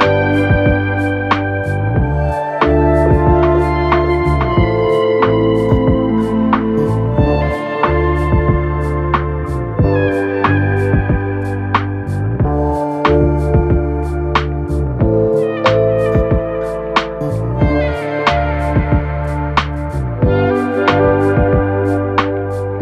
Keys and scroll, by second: 4.4 Return, 18.8 Up, 19.3-19.7 typing.